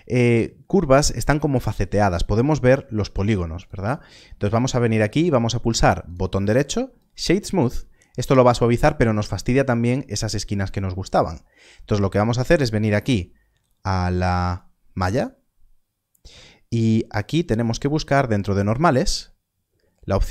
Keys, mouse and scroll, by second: 3.6 shift+click, 14.5 click, 17.7 click.